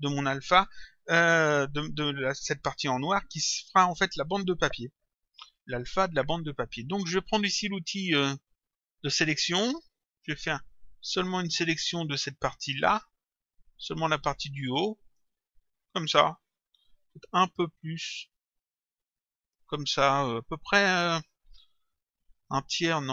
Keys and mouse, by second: 8.2 click, 10.7 click, 17.9 click.